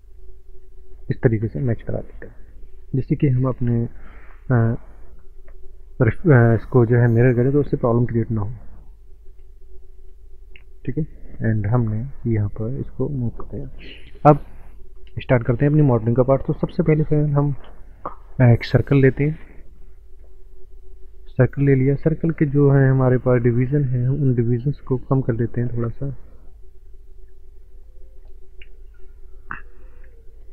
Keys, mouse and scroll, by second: 9.7 click, 9.8 click, 11.5 click, 12.1 click, 13.3 click, 13.9 scroll down 1, 14.9 middle click, 14.9 scroll down 5, 15.3 scroll up 1, 15.5 middle click, 16.7 shift+a, 20.1 click, 21.7 scroll up 1, 26.1-26.6 scroll up 1, 26.6 scroll down 1, 27.3 scroll down 1, 27.5 middle click, 27.6 middle click, 28.7 Delete, 29.7 click.